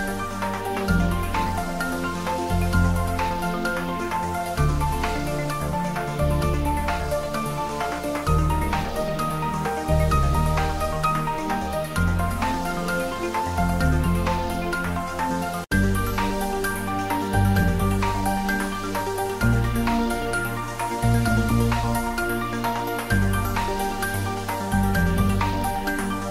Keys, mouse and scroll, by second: 0.1 click, 0.4-1.3 typing, 1.6 Return, 2.8 click, 3.1 ctrl+s, 5.8 click, 6.1-7.1 typing, 7.3 click, 7.6 ctrl+s, 7.7 click, 8.2 ctrl+s, 9.4 click, 9.7 ctrl+s, 17.6 shift+Num_Lock, 17.7-19.1 shift+middle drag, 19.1 click, 19.7-20.0 typing, 21.8 click, 22.5 ctrl+s, 22.9-23.9 typing.